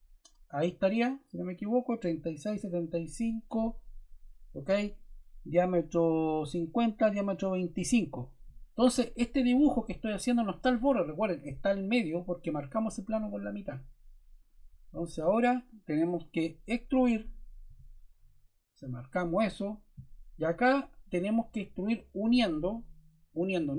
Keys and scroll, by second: 17.6 e.